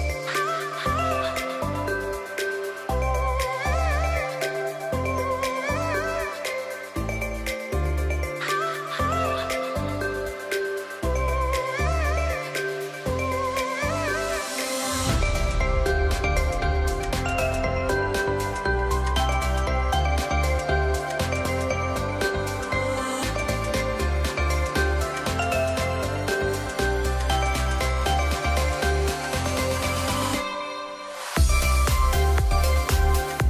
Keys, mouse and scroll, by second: 5.0 space, 5.2 click, 5.5-5.8 space, 5.8 ctrl+z, 6.8 click, 10.4 space, 10.5 click, 10.9-11.5 alt+scroll down 1, 11.5 click, 13.1 space, 13.2 click, 14.9 ctrl+z, 15.6 click, 17.2 space, 17.3 click, 25.3 space, 25.6 click, 25.7-26.1 alt+scroll up 1, 26.3 click.